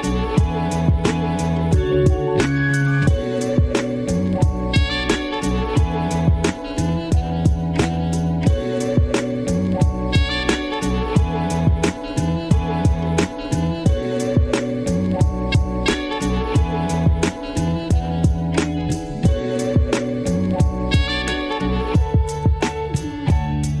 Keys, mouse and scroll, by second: 0.3 g, 1.6 click, 1.7-3.3 typing, 2.2 click, 2.6 click, 2.9 click, 3.6 click, 4.2 click, 4.6 click, 5.1 middle click, 5.4 ctrl+z, 5.5 ctrl+z, 5.7 ctrl+z, 5.8 middle click, 10.9 click, 11.0 click, 11.5 scroll up 2, 11.6 shift+click, 12.0-16.6 typing, 14.0 click, 14.0 middle click, 14.2 click, 14.9 click, 15.3 middle click, 15.8 click, 16.1 middle click, 16.6 click, 16.9 middle click, 17.3 click, 17.4 middle click, 18.1 click, 18.2 g, 18.9 click, 19.1 middle click, 19.6 middle click, 19.7 click, 19.8 g, 20.1 g, 20.3 middle click, 20.8 g, 21.0 middle click, 21.2 g, 21.3 middle click, 22.2 click, 22.6 middle click, 23.1 click, 23.3 middle click, 23.5 Tab, 23.6 middle click.